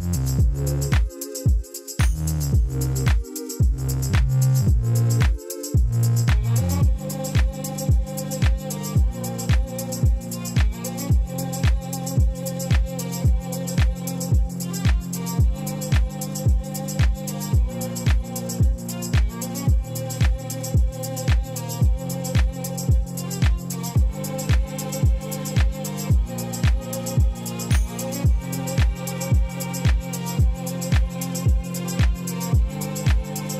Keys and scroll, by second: 2.5 ., 2.7 Return, 7.6 shift+d, 7.8 shift+z, 9.0 m, 10.3 Return, 11.3 g, 11.4 z, 12.0 r, 13.8 g, 13.9 shift+z, 23.5 ctrl+z, 24.2 ctrl+z, 24.5 ctrl+z.